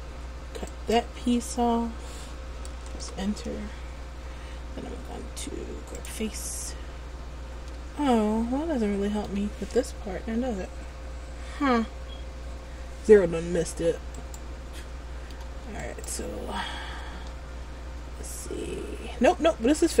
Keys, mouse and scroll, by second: 6.1 click, 7.8 middle click, 13.7 Tab, 14.4 right click, 14.9 middle click, 16.0 right click, 17.2 Tab.